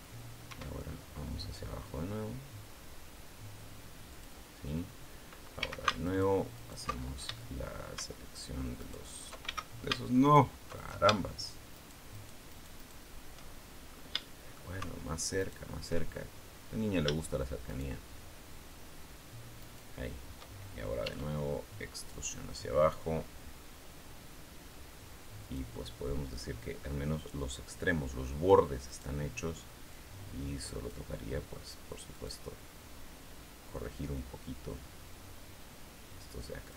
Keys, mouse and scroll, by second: 0.3 e, 4.0 click, 5.4 a, 5.9 alt+shift+right click, 6.4 alt+shift+right click, 7.2 shift+middle click, 7.2 shift+scroll up 2, 8.6 alt+shift+right click, 9.2 alt+shift+a, 10.0 alt+shift+right click, 10.6 alt+shift+right click, 11.5 alt+shift+right click, 12.0 alt+shift+right click, 12.3 alt+shift+right click, 13.7 scroll up 1, 14.0 shift+middle click, 15.2 alt+shift+right click, 15.8-16.2 alt+shift+scroll down 1, 17.4 shift+right click, 19.4 shift+right click, 20.8 e, 25.2 click, 28.6 right click, 29.7 click, 30.8-31.9 middle drag, 31.9 right click, 34.2-36.7 drag.